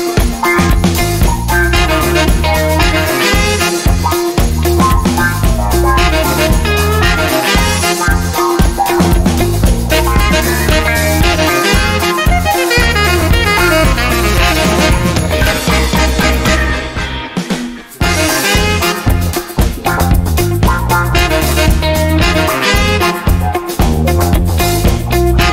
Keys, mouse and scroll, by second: 0.4 click, 1.0 0, 1.6 click, 2.0 0, 2.5 click, 2.8 0, 3.9 click, 5.1 click, 6.0 0, 7.7 click, 8.0 0, 8.6 click, 9.0 0, 9.9 click, 11.2-15.4 drag, 15.8 0, 17.5 click, 18.7 click, 23.0 click, 24.4 click.